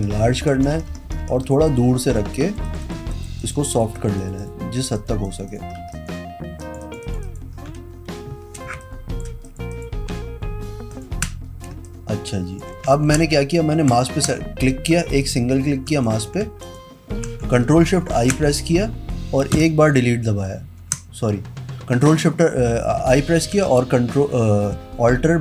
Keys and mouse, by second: 0.0-2.2 typing, 1.5 click, 1.8 click, 2.1 click, 2.5 click, 2.8 click, 2.9 click, 3.2 click, 3.5 click, 3.8 click, 4.1 click, 4.3 click, 4.5 click, 5.1 click, 5.4 click, 5.6 click, 5.9 ], 6.1 click, 6.6 ], 7.1 click, 7.3 click, 8.8 space, 8.9 click, 9.6 click, 9.8 click, 11.0 ctrl+click, 11.8 space, 12.0 click, 12.3 click, 13.1 ctrl+d, 14.0 ctrl+click, 15.3 click, 16.1 click, 16.8 ctrl+click, 18.3 ctrl+shift+i, 20.9 ctrl+z.